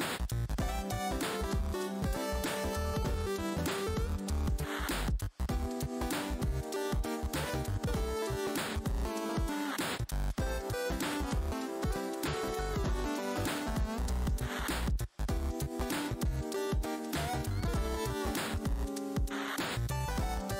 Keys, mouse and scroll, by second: 0.6 w, 1.8 scroll down 1, 2.3 scroll, 2.6 scroll down 1, 2.6 click, 3.0 scroll up 1, 3.7 click, 3.8-4.6 typing, 4.8 click, 7.5 w, 9.5 w, 10.2 click, 11.6 shift+v, 12.9 alt+click, 14.4 r, 14.8 alt+click, 15.7 ctrl+click, 16.2 alt+scroll down 1, 16.2 z, 16.7 ctrl+click, 17.4 scroll down 1, 17.4 z, 18.7 ctrl+click, 19.6 ctrl+space, 20.3 f.